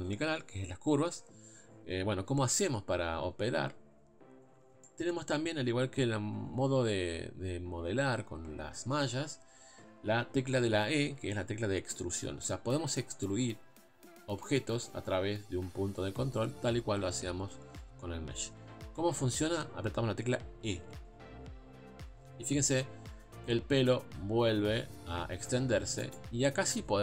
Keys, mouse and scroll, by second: 3.5-4.8 scroll up 2, 4.9-18.9 shift+middle drag, 18.9-19.4 scroll down 1, 20.8 e, 26.8-27.0 scroll down 1.